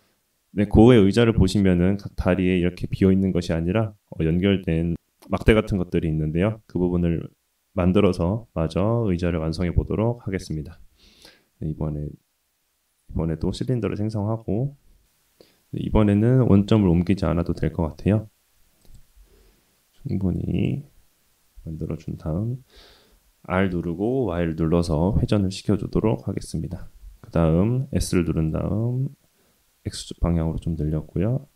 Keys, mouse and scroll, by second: 1.3-4.1 middle drag, 4.7-5.6 middle drag, 8.1-9.3 middle drag, 11.0 shift+a, 18.8 s, 19.1 s, 21.7 r, 26.7 s, 28.8-30.8 middle drag.